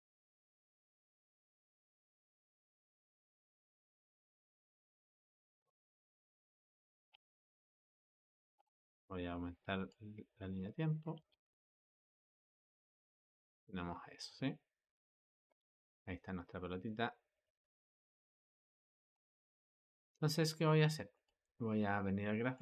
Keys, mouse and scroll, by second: 1.0-1.8 drag, 1.8 g, 6.2-7.0 drag, 7.0 space, 8.4 space, 9.7-11.0 drag, 11.0 space, 17.2 click, 19.0 click, 19.8 Escape, 21.0-22.6 drag.